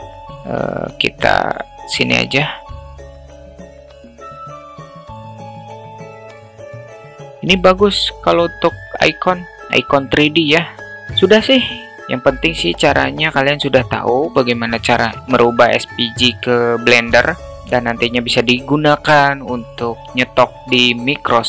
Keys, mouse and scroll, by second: 0.2-2.4 alt+middle drag, 3.5 q, 4.9 ctrl+z, 6.1 click, 11.0 click.